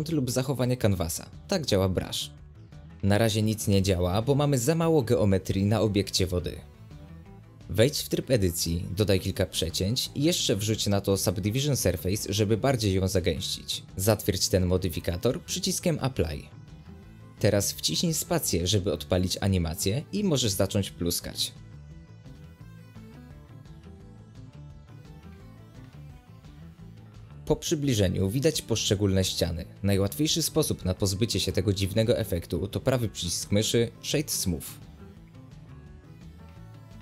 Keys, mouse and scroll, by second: 1.7 space, 2.4 click, 3.7 click, 3.9 g, 6.9 space, 7.4 click, 7.9 scroll down 1, 8.0 middle click, 8.2 ctrl+r, 9.2 ctrl+r, 10.0 middle click, 10.2-10.6 scroll up 1, 10.6 Tab, 12.7-14.1 drag, 14.8-15.4 drag, 15.4 scroll up 1, 15.6 middle click, 15.8 Tab, 16.1 middle click, 16.4 alt+a, 16.5 middle click, 17.4 Tab, 18.6-21.9 middle drag, 21.9 space, 22.3 click, 26.4-27.1 right drag, 27.1 click, 28.0 click, 28.5 g, 29.6 space, 30.5 g, 31.8 space, 32.1 g, 33.2 space, 33.5 scroll up 1, 33.8-35.7 middle drag, 35.7-37.0 right drag.